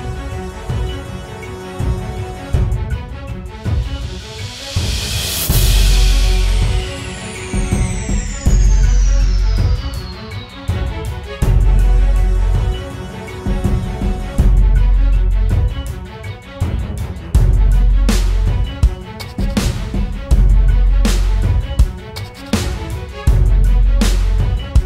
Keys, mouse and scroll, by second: 3.1-4.2 alt+scroll up 1, 7.3-7.8 typing, 8.2 double click, 12.2 typing, 13.1 double click, 21.9 double click, 24.2 typing.